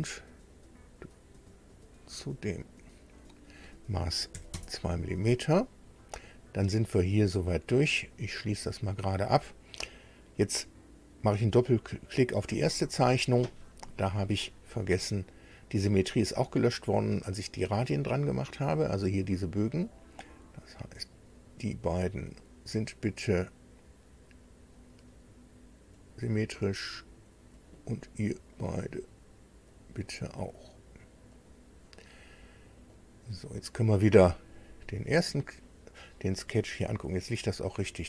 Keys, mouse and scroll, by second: 0.5 click, 1.7 click, 3.2 click, 4.3 KP_2, 4.5 KP_Enter, 8.0 click, 12.5 click, 13.8 scroll down 2, 17.9 click, 21.1 click, 22.3 click, 25.9 click, 27.5 click, 28.5 click, 29.7 click, 31.3 click, 32.9 click, 35.0 click, 36.6 scroll down 2.